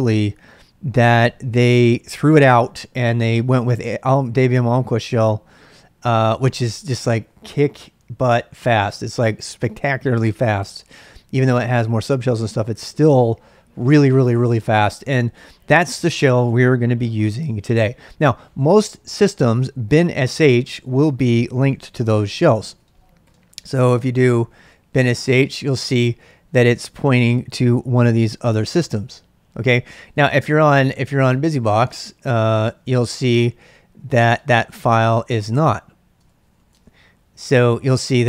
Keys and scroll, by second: 21.7 ctrl+a, 22.0-25.6 typing, 30.2-37.0 typing.